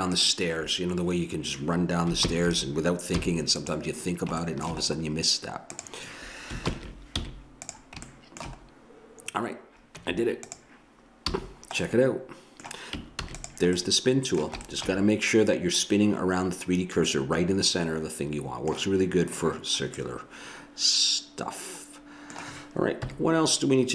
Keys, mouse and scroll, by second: 0.2-1.7 drag, 2.2 ctrl+l, 3.2 x, 4.5 middle click, 4.9 middle click, 5.7 right click, 6.7 ctrl+l, 7.2 x, 8.1 middle click, 10.0 Tab, 11.2 a, 11.9-13.2 middle drag, 13.2 ctrl+s, 17.1-19.3 middle drag, 20.0 middle click, 23.0 KP_1.